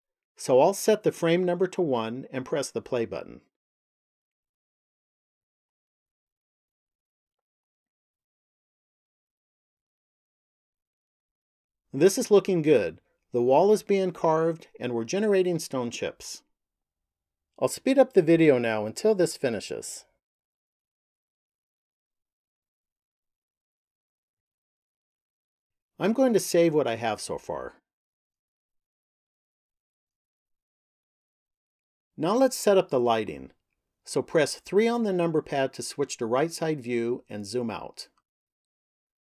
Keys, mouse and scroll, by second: 0.8 click, 2.5 click, 23.9 click, 28.5 click, 34.4 KP_3, 35.7-36.4 scroll down 2, 36.6-39.0 scroll down 5.